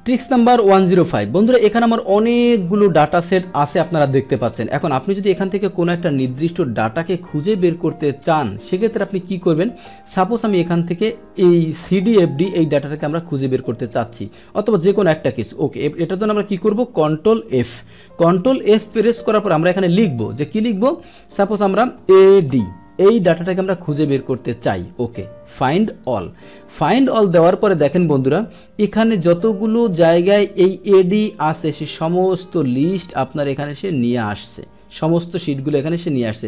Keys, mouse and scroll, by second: 1.9-2.7 scroll down 2, 2.7 scroll down 1, 2.7 scroll up 2, 4.4 click, 12.0 click, 12.8 click, 15.2 click, 16.0 click, 17.6 ctrl+f, 17.8 ctrl+f, 18.5 ctrl+f, 18.5 click, 19.8 click, 26.0 click, 28.8 click, 30.8-34.6 drag.